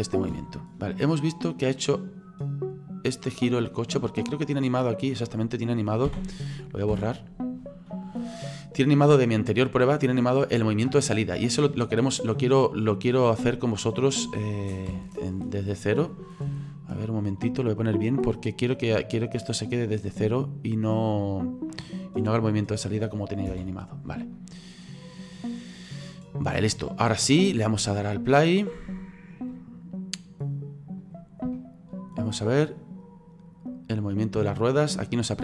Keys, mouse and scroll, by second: 0.3 space, 0.9 click, 4.6 right click, 6.1 a, 6.9 Delete, 8.7-9.3 scroll up 3, 9.3-11.4 middle drag, 11.4 click, 14.9 KP_1, 16.0-16.6 scroll up 4, 16.6-18.6 shift+middle drag, 18.6 click, 22.6 right click, 23.5 Delete, 29.5-31.1 drag, 31.5-35.4 shift+middle drag.